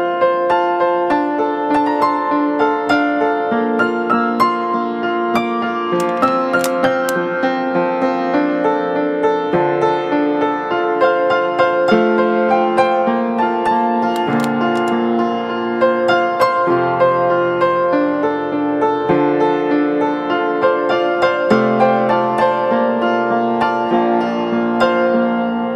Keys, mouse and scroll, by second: 17.1 right click.